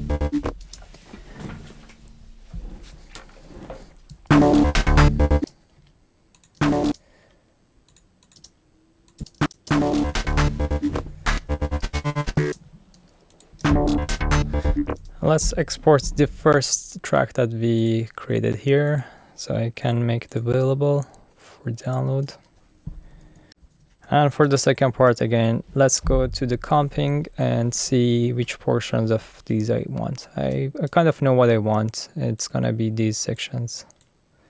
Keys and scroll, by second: 0.6 space, 4.3 space, 6.6 space, 8.3 space, 12.5 space, 13.6 space, 15.0 space, 23.4-24.3 typing, 24.5 alt+super+u.